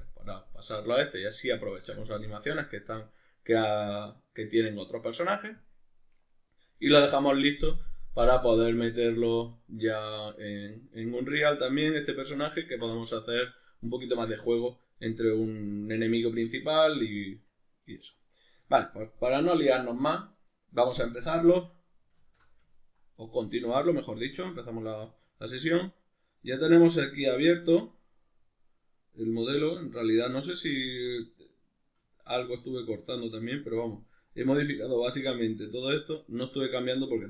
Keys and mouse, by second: 0.8 middle click, 11.6 middle click, 12.6-17.4 ctrl+middle drag, 17.4 right click, 22.2 alt+q, 22.8-37.0 ctrl+middle drag, 24.1 Tab, 37.0 right click.